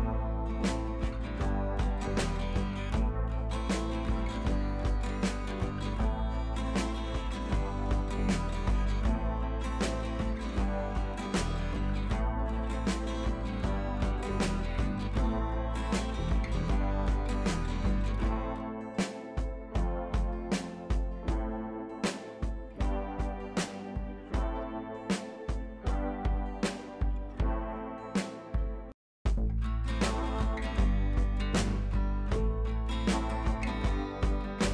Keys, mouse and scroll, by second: 1.2 scroll up 1, 1.9 click, 2.6 ctrl+t, 3.4-4.7 alt+drag, 5.2 scroll up 1, 5.5 space, 5.5-5.9 click, 5.9-6.2 scroll up 1, 6.2-7.8 drag, 9.0 ctrl+t, 11.9-13.4 alt+drag, 14.9-15.4 scroll down 1, 15.4-16.0 scroll up 1, 16.0-20.4 drag, 24.1 shift+click, 25.4 click, 26.1 ctrl+z, 26.6 ctrl+z, 27.3-30.2 drag, 30.6 t, 30.8 click, 31.7 Caps_Lock, 31.9-34.4 typing, 32.0 Caps_Lock.